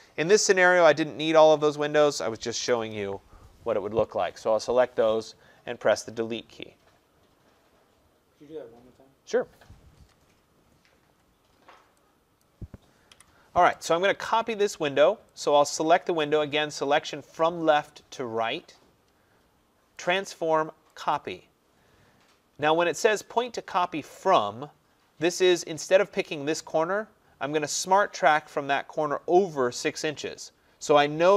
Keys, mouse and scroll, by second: 1.9 click, 2.7 Delete, 10.8 middle click, 10.9-11.5 middle click, 11.3 middle click, 12.5 click, 13.2 Delete, 16.3 click, 20.2 click, 21.2 click.